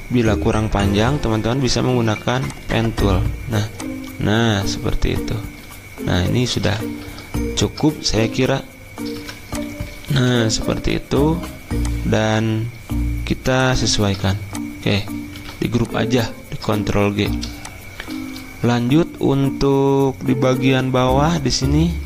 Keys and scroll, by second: 0.4 p, 6.6 v, 9.2 v, 10.3 Escape, 15.3 ctrl+g.